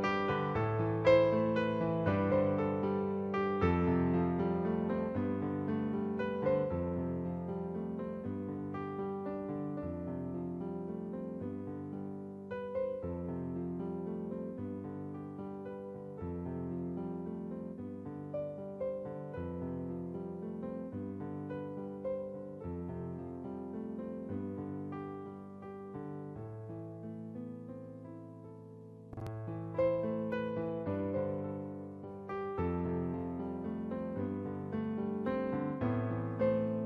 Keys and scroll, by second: 0.1 ctrl+t, 2.3 Return, 8.6 i, 11.5 b, 15.0-15.7 typing, 27.2 Down, 34.4 ctrl+t.